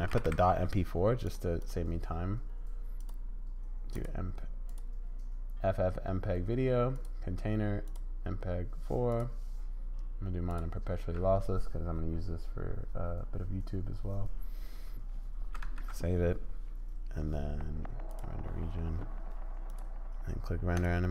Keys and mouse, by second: 3.0-4.0 drag, 4.8 click, 6.9-8.0 drag, 8.0-9.3 middle drag, 9.3-10.6 drag, 10.6-15.5 middle drag, 15.6 ctrl+s, 18.1 click, 19.8-21.1 drag.